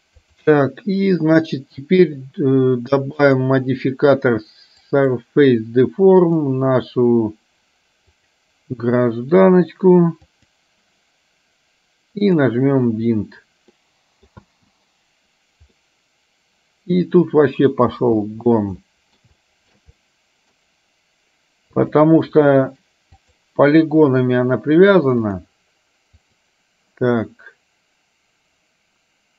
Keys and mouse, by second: 0.3 click, 3.4-5.2 drag, 8.3 click, 12.2 click, 13.9 middle click, 14.5 space, 15.9-17.2 middle drag, 18.0 space, 18.9 middle click, 19.4 shift+middle click, 20.0 middle click, 21.8 click, 22.5 middle click, 23.4 click, 26.3 click.